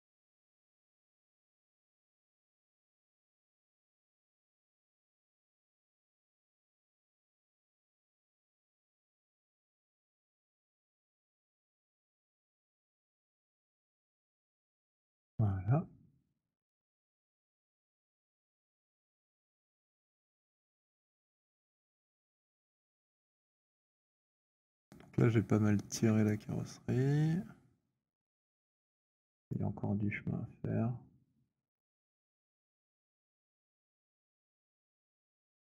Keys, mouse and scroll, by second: 0.7 click, 3.0 alt+click, 3.4 b, 6.0-8.8 typing, 8.6 click, 14.9 click, 16.8 click, 18.3 alt+click, 19.5 click, 21.9 click, 21.9 z, 23.4 click, 28.2 alt+click, 29.5 click, 31.5 click, 31.7 z, 32.8 v, 34.1-34.8 b, 35.4 b.